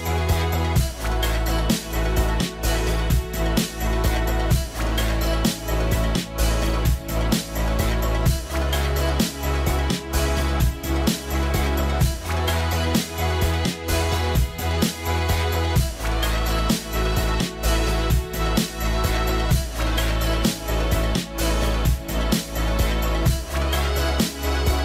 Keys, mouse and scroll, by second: 2.3 middle click, 2.3 scroll up 1, 7.0 scroll, 7.1 right click, 9.7 right click, 15.7 right click, 15.8-16.3 scroll up 1, 16.6 middle click, 18.8 right click, 21.2 right click, 24.7 right click, 24.7 scroll down 1.